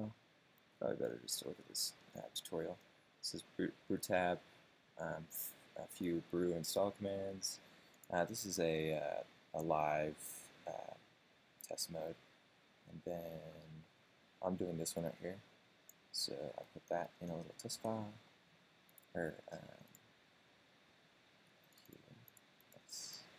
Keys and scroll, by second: 17.5 super+space.